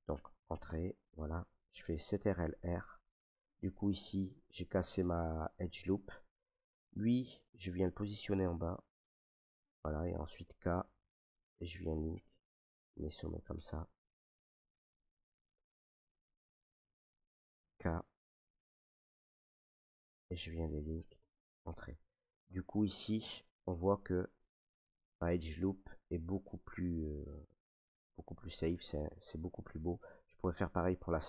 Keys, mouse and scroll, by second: 0.6 Return, 2.4 ctrl+r, 3.5 Return, 5.9-7.5 drag, 8.9 click, 10.4 k, 11.6 click, 13.2 click, 14.2 Return, 15.6 middle click, 16.4-19.0 middle drag, 17.6 k, 19.0-21.1 drag, 21.1 Return, 21.5 middle click, 21.6 middle click, 22.3 middle click, 22.4 Tab, 23.3 middle click, 31.0 middle click.